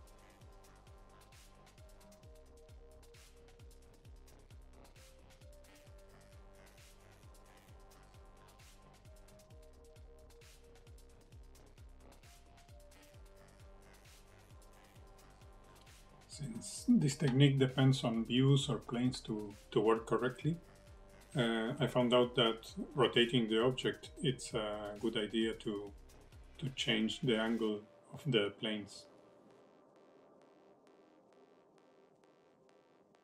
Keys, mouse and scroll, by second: 0.4 click, 1.4 middle click, 2.6 click, 4.0 middle click, 4.6 click, 4.7 shift+middle click, 5.1 click, 6.3 middle click, 6.6 click, 7.5 middle click, 7.8 click, 8.4 middle click, 8.7 click, 9.1 middle click, 9.4 click, 9.8 middle click, 10.1 click, 10.6 middle click, 10.8 click, 11.4 scroll down 3, 11.5 middle click, 12.5 scroll down 2, 12.7 shift+middle click, 13.0 middle click, 13.1-13.8 scroll down 1, 14.2 middle click, 14.6 middle click, 14.6 scroll up 1, 15.7 KP_1, 17.4 shift+middle click, 20.4 click, 24.1 click, 25.9 click, 27.3 click.